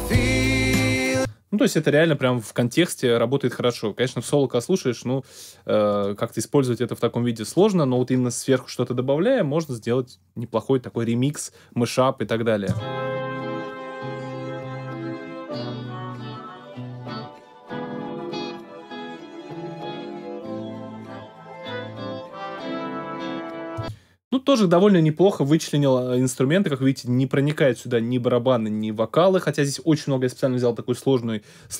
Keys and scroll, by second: 1.1 space, 12.6 space, 23.7 space.